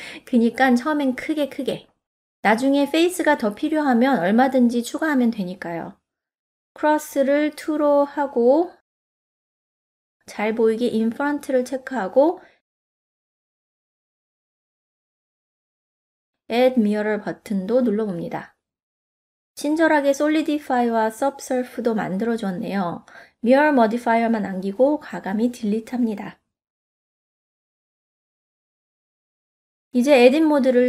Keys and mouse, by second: 6.9-8.6 drag, 11.9 click, 12.8-14.7 middle drag, 18.1 click, 20.0 click, 22.2 click, 23.0-25.5 drag, 25.5-27.9 middle drag, 30.2 Tab.